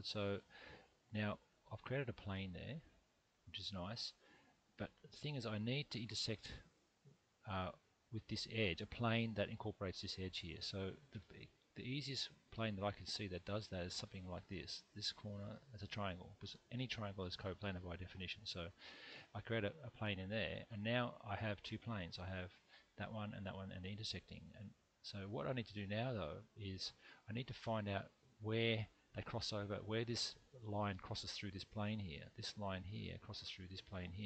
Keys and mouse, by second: 3.9-5.1 middle drag, 8.6 2, 9.0 click, 11.1 1, 11.7-13.6 middle drag, 14.4 click, 16.2 shift+click, 19.1 f, 19.7-21.2 middle drag, 24.5-25.8 middle drag, 27.1 middle click, 28.4 middle click, 29.8 middle click.